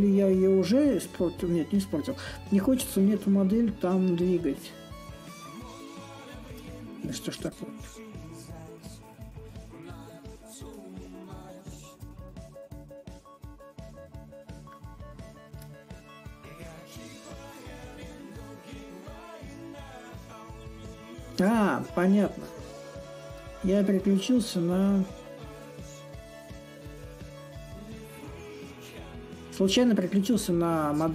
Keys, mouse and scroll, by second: 3.4-4.7 alt+drag, 4.7 ctrl+z, 5.3-6.3 alt+drag, 6.3 ctrl+z, 8.5-10.4 drag, 11.2 click, 14.4 shift+click, 17.2-22.7 shift+drag, 23.3 alt+click, 26.1-31.1 drag.